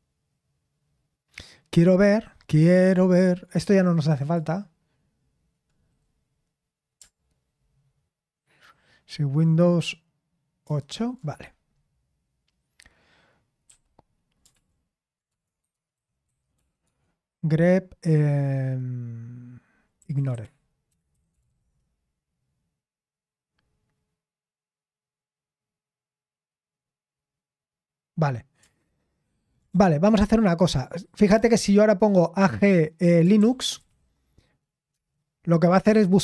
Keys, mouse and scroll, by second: 10.6 super+(, 15.3-17.0 typing, 21.1-21.9 typing, 28.8 ctrl+p, 29.7-30.7 BackSpace, 32.9-34.3 typing, 34.9 Return.